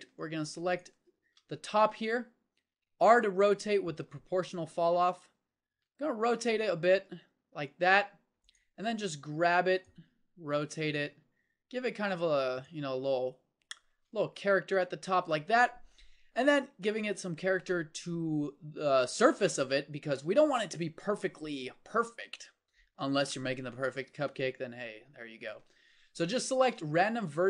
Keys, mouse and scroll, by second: 0.0 b, 1.2 z, 1.9 middle click, 2.8 r, 8.9 g, 10.1 r, 11.0 g, 13.0 middle click, 14.6 Tab, 24.3 Tab, 26.6 g.